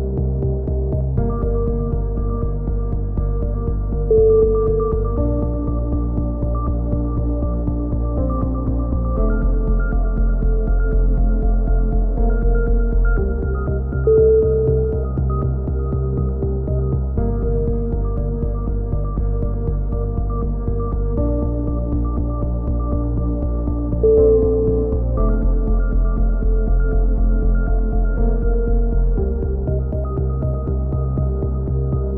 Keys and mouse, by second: 0.0-0.9 drag, 1.7 c, 2.8 right click, 2.9-3.9 middle drag, 7.0 middle click, 7.0 c, 7.7-8.2 middle drag, 8.2-9.2 drag, 9.2 c, 10.2-10.9 drag, 11.0 ctrl+KP_3, 13.0 c, 14.0-14.4 drag, 15.5-18.6 typing, 18.0-18.6 drag, 19.3 ctrl+KP_3, 20.1-20.4 drag, 20.1 z, 20.5 click, 22.2-22.8 drag, 22.2-22.8 right drag, 24.1 c, 24.8 click, 27.0 a, 27.1 z, 27.4 Tab, 28.0 Tab, 29.6 alt+h, 29.7 a, 29.9 Tab, 31.1 middle click, 31.2-32.0 drag.